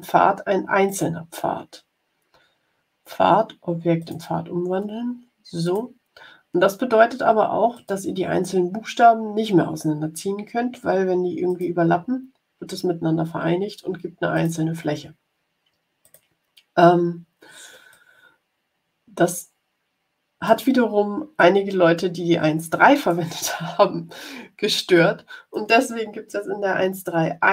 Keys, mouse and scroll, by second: 0.8 click, 3.9 click, 5.6 click, 7.7 click, 11.4 click, 14.3 click, 15.9 click, 17.8-20.6 drag, 21.3-23.2 drag, 24.9 click.